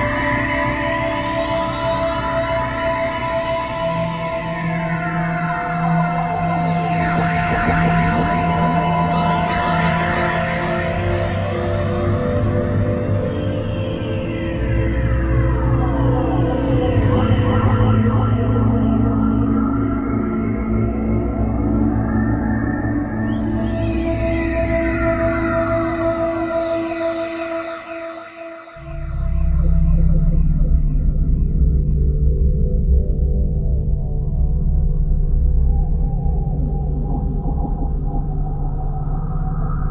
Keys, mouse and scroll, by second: 0.9 click, 3.7 middle click, 11.3 click, 13.1 right click, 14.1 shift+right click, 16.6 shift+right click, 17.5 shift+right click, 23.5 middle click, 30.8 click, 34.8 e.